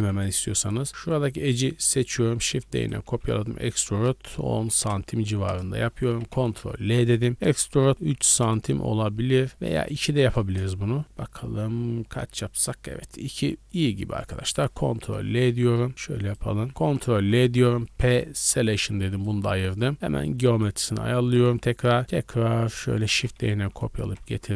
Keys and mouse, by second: 0.1 click, 0.2 middle click, 0.5 middle click, 2.4 shift+d, 3.0 e, 6.2 ctrl+l, 6.4 ctrl+click, 7.3 e, 9.5 click, 9.9-12.9 drag, 12.9-13.7 middle drag, 13.7-15.5 drag, 15.0 ctrl+l, 17.9 p, 18.8 Tab, 19.1 click, 19.1 middle click, 19.1 right click, 19.7 middle click, 19.9-21.4 drag, 20.0 w, 21.4 KP_1, 21.6 KP_3, 23.1 shift+d, 24.0-24.5 middle drag, 24.0 g.